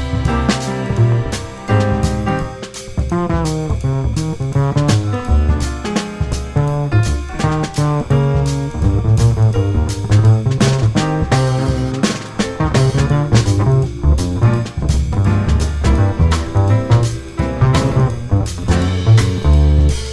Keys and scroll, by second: 2.4 1, 2.6 F4, 4.3 F4, 5.1 F4, 6.5 F4, 7.5 F4, 10.2 F4, 10.9 alt+F4, 11.9 F4, 14.4 F4, 16.7 2, 16.8 F4, 17.4 ctrl+r, 17.6 ctrl+c, 18.6 2, 19.4 F4.